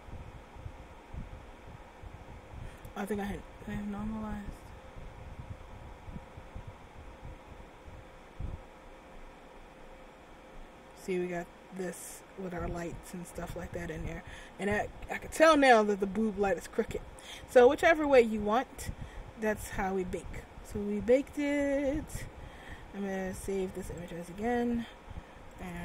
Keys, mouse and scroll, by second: 10.5 Tab, 18.2 click.